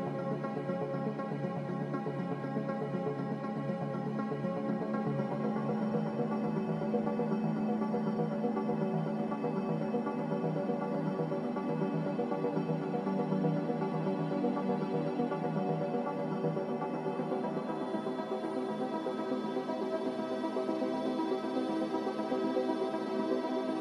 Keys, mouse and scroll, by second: 1.5 click, 2.0 Caps_Lock, 3.2 a, 3.6 Tab, 5.4 click, 7.3 click, 7.9 b, 9.9 ctrl+b, 14.0 b, 14.8 Delete, 17.1 click, 22.3 click, 23.5 a.